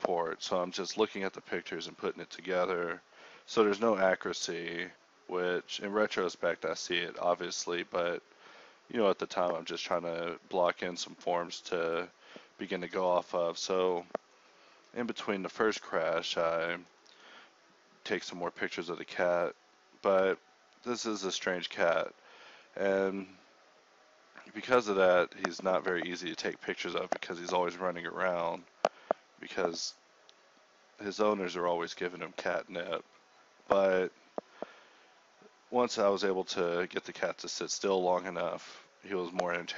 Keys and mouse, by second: 1.6 click, 2.0 click, 3.0 shift+a, 5.3 click, 6.3 t, 7.5-11.6 typing, 12.9 KP_1, 13.8 Tab, 13.9 z, 14.4 ctrl+Tab, 14.4 z, 16.7-30.4 typing, 18.4 ctrl+Tab, 23.0 ctrl+Tab, 24.4 ctrl+r, 25.7 ctrl+Tab, 32.3 ctrl+b, 33.4 alt+s, 33.9 Tab, 34.0-35.7 typing, 34.2 Tab, 37.9-39.7 typing.